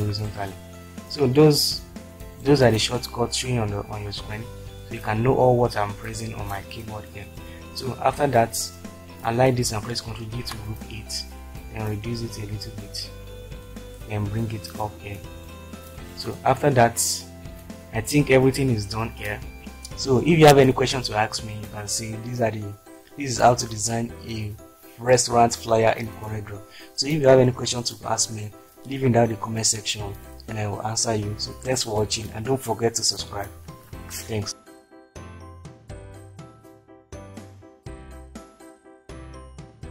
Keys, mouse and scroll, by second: 4.1 shift+F4, 10.4 ctrl+g.